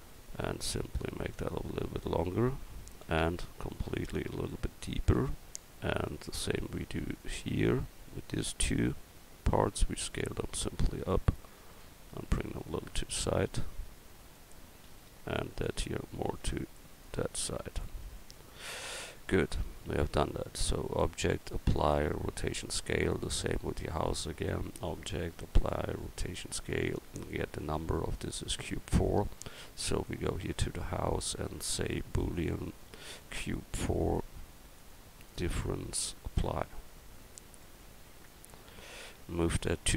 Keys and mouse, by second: 0.1 right click, 3.0 l, 5.1 Tab, 5.6 Tab, 8.6 l, 9.1 l, 9.8 s, 11.8 click, 14.9 a, 15.7 l, 18.0 Tab, 27.1-31.1 right drag, 31.1-32.5 drag, 32.5-37.7 right drag, 37.2 click.